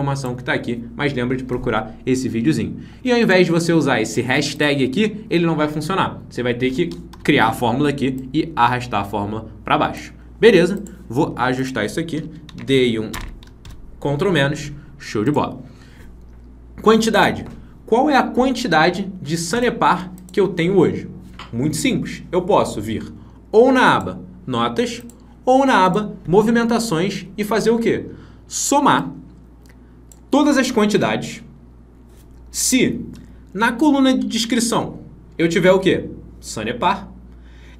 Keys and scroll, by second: 12.5 ctrl+Down, 13.5 ctrl+-.